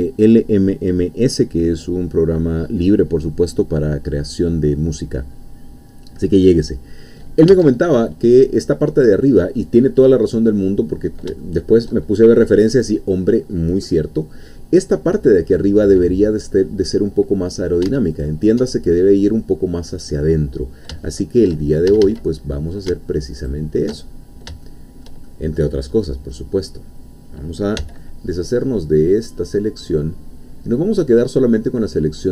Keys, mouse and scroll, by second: 7.5 Tab, 8.4-9.7 middle drag, 9.9-10.3 scroll up 1, 10.7 middle click, 11.4-17.8 shift+middle drag, 18.1 alt+shift+click, 21.1 shift+middle click, 21.9 shift+a, 22.4 shift+middle click, 23.5 alt+shift+click, 24.2 alt+shift+scroll down 3, 24.6 shift+middle click, 25.6-26.7 middle drag, 26.7-27.8 scroll up 2, 27.8 c, 28.4-32.3 middle drag.